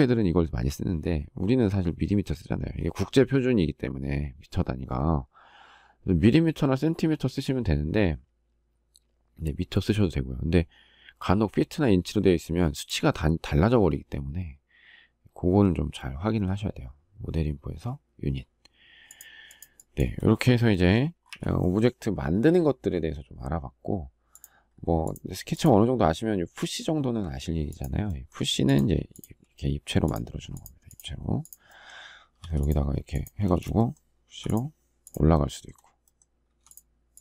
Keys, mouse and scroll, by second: 21.0 Delete, 33.2 space, 34.0 p.